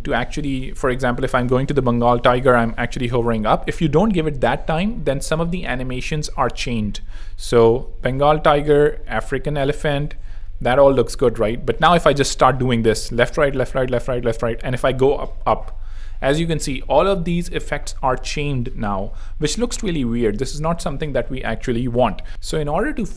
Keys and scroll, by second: 22.1 super+2, 22.2 super+z.